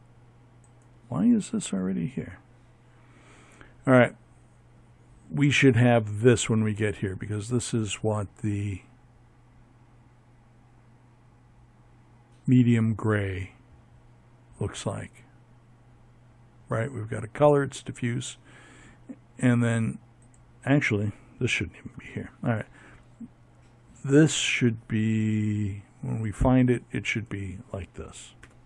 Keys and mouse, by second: 0.5 x, 20.0 x, 24.4-28.6 drag.